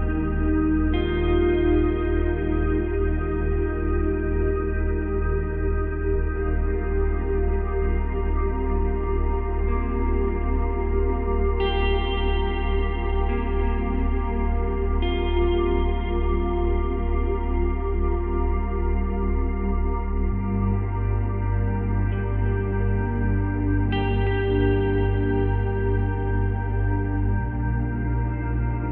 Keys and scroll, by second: 9.5 space.